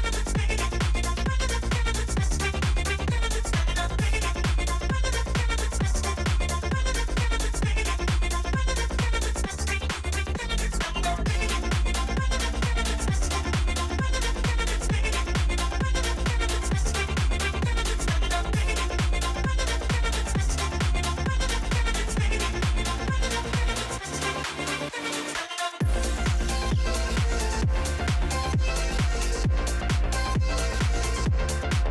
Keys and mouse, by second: 0.0 shift+click, 1.7 shift+a, 2.9 ctrl+alt+KP_0, 4.0 g, 7.7 KP_0, 8.9 z, 12.6 click, 13.6-14.9 drag, 14.7 KP_0, 16.7 click, 17.7-19.5 drag, 20.4 g, 24.7 KP_7, 25.9 g, 28.1-28.9 typing.